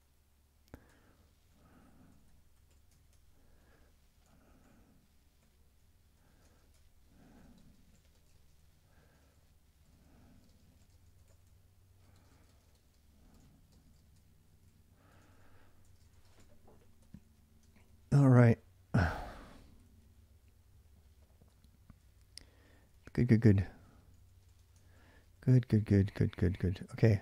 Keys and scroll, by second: 0.0-27.2 typing, 17.4 ctrl+[, 17.5 ctrl+j.